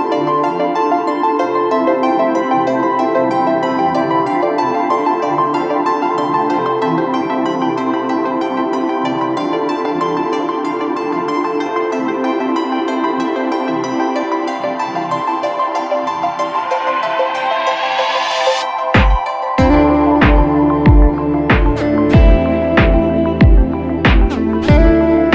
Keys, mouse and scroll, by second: 9.0 right click, 14.5 alt+click, 17.2 shift+click.